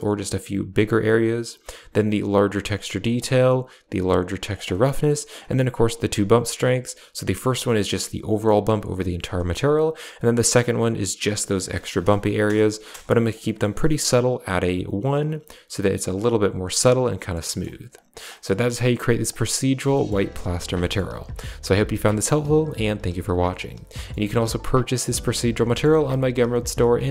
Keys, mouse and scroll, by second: 1.8 click, 3.0-4.3 drag, 4.6 middle click, 5.7-9.2 drag, 10.0-11.5 drag, 12.4 BackSpace, 12.8 BackSpace, 13.3 middle click, 17.0 middle click, 17.3 middle click, 17.8 click, 18.2 middle click, 19.2 click, 19.8 middle click, 20.2 a, 20.3 click, 20.7 middle click, 21.5 a, 21.8 middle click, 23.8 middle click, 24.7 click, 25.5 middle click.